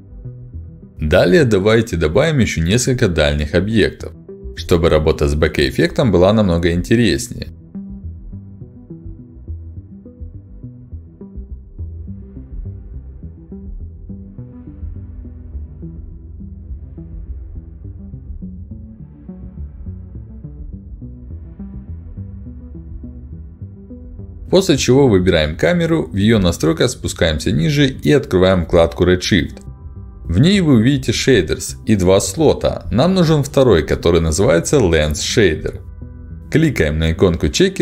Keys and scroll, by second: 1.4 w, 8.4 r, 8.8 q, 12.2 w, 13.3 r, 14.2 q, 14.3 w, 16.1 q, 33.9 ctrl+alt+d.